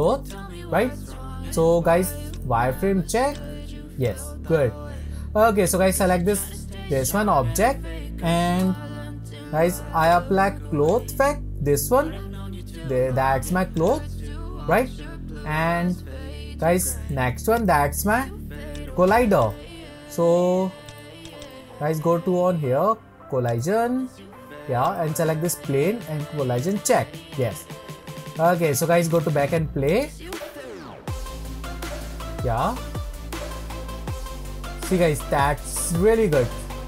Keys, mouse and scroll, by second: 0.0 click, 0.6-2.3 scroll up 2, 2.3-4.1 drag, 4.3-5.1 scroll down 3, 5.1-5.7 scroll up 1, 5.7 click, 8.6 n, 10.0 click, 10.8-13.9 drag, 14.6 scroll up 1, 14.7-17.5 middle drag, 17.5 click, 18.7 click, 19.4 click, 20.8 click, 21.2 click, 21.4 click, 23.4-24.9 drag, 26.5 click, 27.4-29.1 middle drag, 29.1-32.9 drag, 34.5-35.8 middle drag, 35.8-36.6 scroll up 3, 36.6-36.8 shift+middle drag.